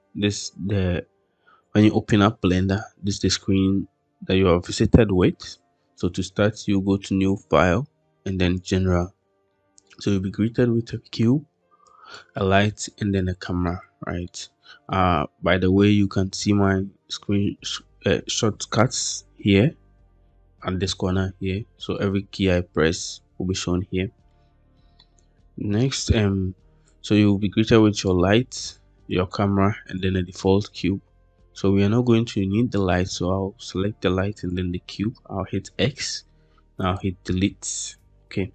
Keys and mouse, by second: 9.4 middle click, 11.9 click, 13.0 drag, 13.5 middle click, 17.5 drag, 21.9 middle click, 24.2 middle click, 24.9 shift+middle click, 25.7 middle click, 26.8-27.9 drag, 32.3 click, 33.6-34.4 drag, 35.0 x.